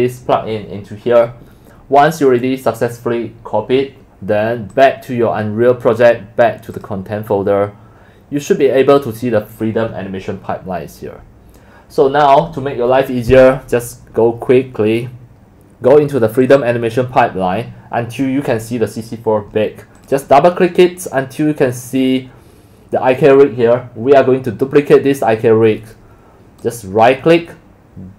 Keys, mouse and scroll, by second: 4.7 click, 5.4 scroll down 2, 6.6 click, 8.4 click, 13.3 drag, 16.2 drag, 16.4 scroll up 2, 20.1 click.